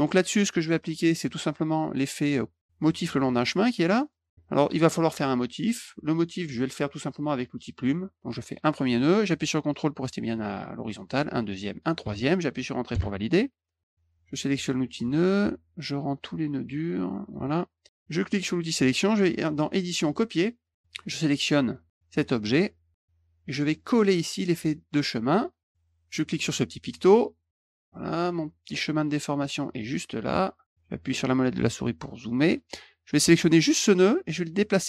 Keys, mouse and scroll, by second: 1.1 click, 4.0 click, 7.7 click, 8.6 click, 10.9 ctrl+click, 11.7 ctrl+click, 12.9 Return, 14.1 click, 15.0 click, 15.4 click, 17.2 click, 17.4 click, 17.9 click, 19.7 click, 20.6 click, 20.7 click, 25.2 click, 26.8 click, 27.3 middle click, 28.2 click, 29.4-30.6 drag, 30.6-31.3 scroll up 2, 32.3 click, 33.8-34.8 drag.